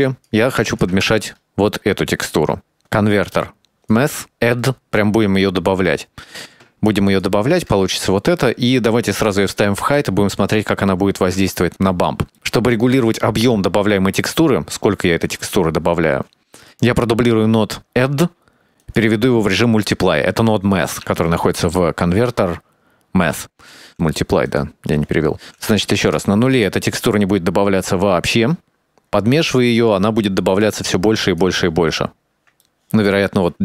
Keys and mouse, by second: 0.1 click, 0.8 click, 1.3 ctrl+shift+click, 2.2 middle click, 2.5 shift+a, 5.1 click, 6.3-6.7 drag, 7.3 ctrl+shift+click, 8.6 middle click, 9.4 click, 10.3 ctrl+shift+click, 11.2 middle click, 11.8 middle click, 12.2 click, 15.1 middle click, 15.5 drag, 15.7 shift+d, 16.3-20.2 drag, 21.2 shift+a, 23.7-24.4 drag, 25.2-31.6 drag, 32.5-32.8 shift+middle drag.